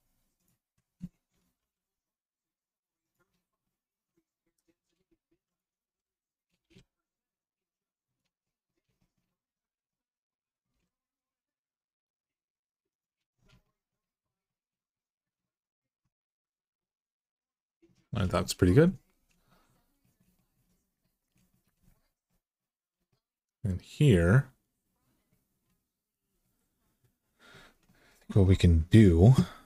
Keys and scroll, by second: 1.3 g, 5.1 1, 6.4 g, 10.5 g.